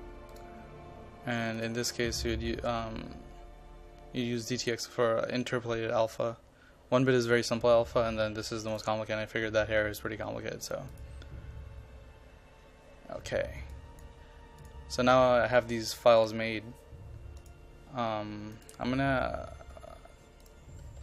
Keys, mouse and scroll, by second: 0.4 click, 1.7-14.7 drag.